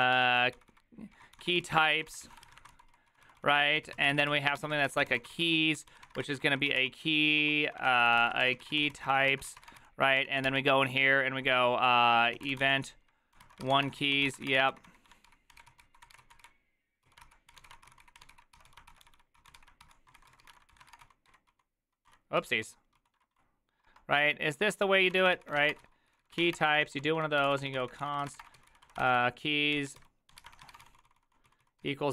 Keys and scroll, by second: 0.0-11.0 typing, 7.4 ctrl+y, 12.1-32.1 typing, 24.2 ctrl+c.